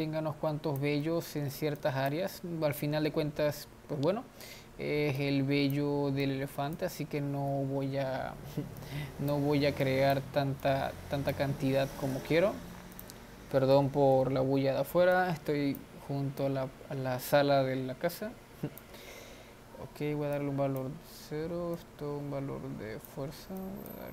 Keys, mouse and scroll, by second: 1.2-2.3 middle drag, 2.3 click, 2.7-5.4 middle drag, 5.4-8.1 drag, 8.1 ctrl+z, 9.0-24.1 drag.